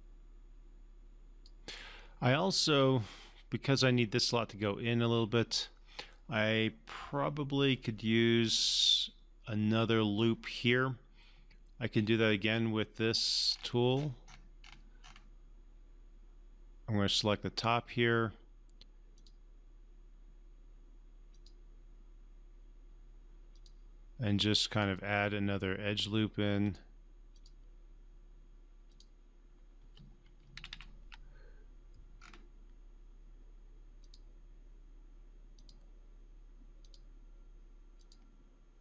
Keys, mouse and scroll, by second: 12.4 click, 13.0 scroll down 1, 13.5-14.9 scroll up 1, 17.0 click, 17.1 click, 30.6 ctrl+z, 32.1-33.6 scroll up 2, 33.6-33.9 scroll up 1, 33.9 click.